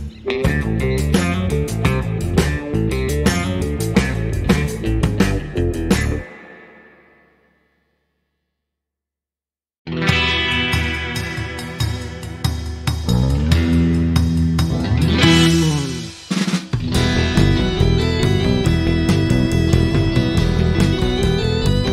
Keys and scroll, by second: 7.5-8.3 typing, 10.7 KP_Decimal, 10.8 KP_0, 11.0 5, 11.0 Return.